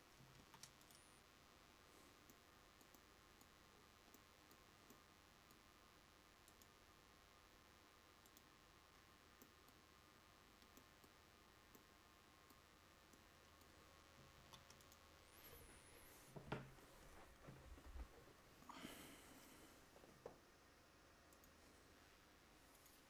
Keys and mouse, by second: 0.5 ctrl+s.